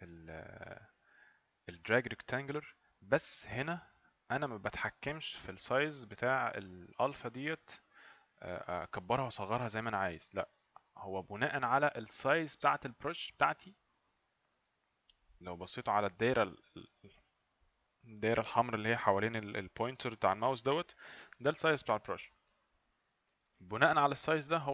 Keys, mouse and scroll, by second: 0.0 click, 0.8 click.